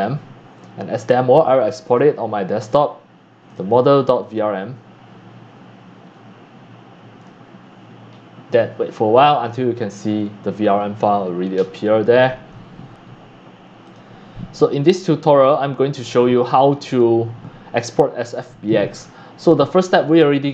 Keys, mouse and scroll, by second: 1.8 click, 4.2 click, 5.6 click, 7.2 click, 7.2 right click, 7.7 scroll down 1, 13.0 scroll up 2, 13.2 scroll, 13.3-13.9 scroll up 2, 13.9-14.8 drag, 14.9 click, 19.7 click.